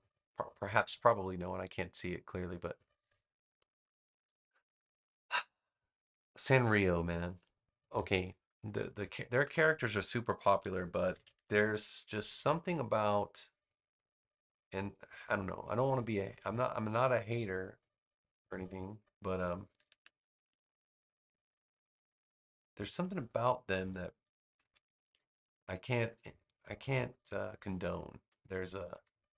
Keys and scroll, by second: 4.6 space, 8.5 space, 10.9 super+c, 11.3 super+v, 19.9 super+z, 24.5 super+c, 24.9 super+v, 28.2 space.